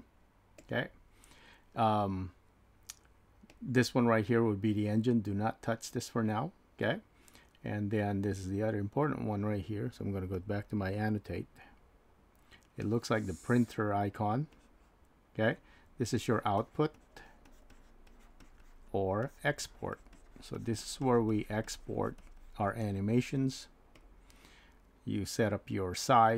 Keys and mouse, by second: 10.4 click, 16.9 click, 17.7-25.5 drag.